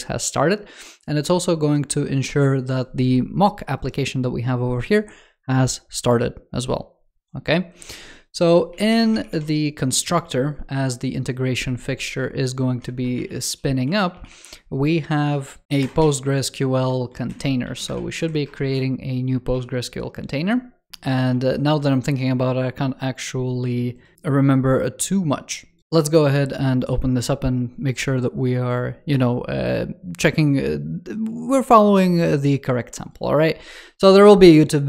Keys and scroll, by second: 17.1 alt+Left, 18.0 super+Right, 21.2 super+3.